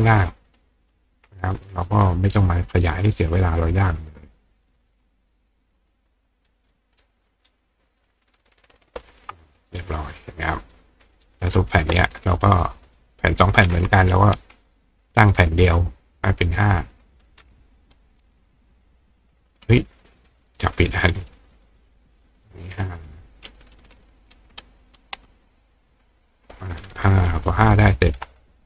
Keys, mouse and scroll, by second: 0.5 right click, 1.8 click, 2.4-3.7 drag, 4.4-4.7 drag, 6.7-8.7 ctrl+drag, 7.0 ctrl+right click, 9.4 click, 10.6 click, 11.2 click, 12.9 click, 13.4-14.1 drag, 14.7 click, 17.0 click, 18.6 click, 20.5 click, 21.6-22.5 drag, 23.7 click, 25.9-28.6 drag.